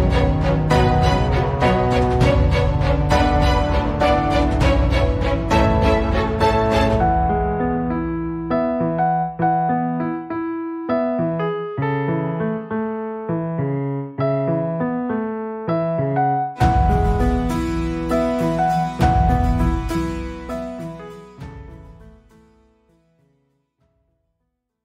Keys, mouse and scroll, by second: 0.1 ctrl+alt+v, 0.5 click, 2.0 b, 3.0 click, 3.4 p, 4.3 click, 4.4 click, 6.8 Return, 8.8 click, 9.4 ctrl+alt+c, 9.7 click, 10.2 ctrl+alt+v, 10.8 click, 11.1 ctrl+scroll down 1, 12.0 click, 13.7 Delete, 14.8 click, 15.3-15.7 ctrl+scroll down 1, 15.9 click, 17.3 ctrl+scroll up 1, 18.6-19.5 drag, 20.1-20.4 click.